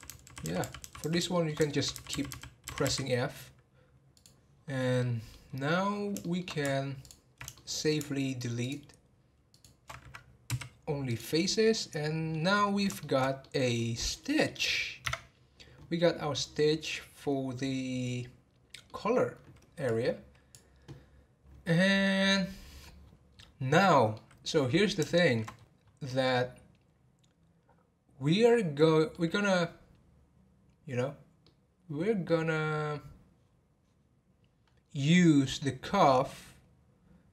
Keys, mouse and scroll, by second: 1.3 shift+middle click, 1.6-3.1 f, 4.1 click, 4.5-4.8 scroll down 5, 5.0 middle click, 5.4 scroll up 1, 6.0 scroll up 3, 6.2 shift+middle click, 7.0 alt+click, 7.5-8.6 shift+middle drag, 8.6 alt+shift+click, 9.5 alt+shift+click, 11.6 scroll down 1, 11.9 middle click, 12.5-13.0 scroll up 4, 13.0-15.0 shift+middle drag, 15.0 Tab, 16.5-19.5 middle drag, 19.9-22.9 drag, 22.9 scroll down 4, 23.7-25.5 middle drag, 25.5-26.0 scroll up 8, 26.0-29.1 middle drag, 31.4-34.1 middle drag, 34.1-35.1 scroll down 4, 35.1-37.3 middle drag.